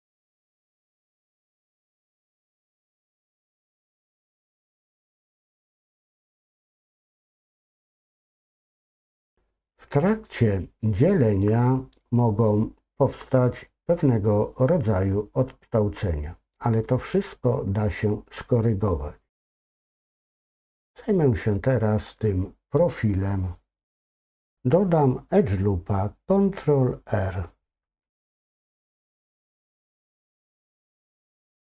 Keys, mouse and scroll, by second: 2.4 ctrl+KP_Subtract, 4.5 x, 8.6-10.8 middle drag, 11.5 middle click, 17.3-17.7 scroll down 2, 17.7-19.4 middle drag, 29.6 ctrl+r.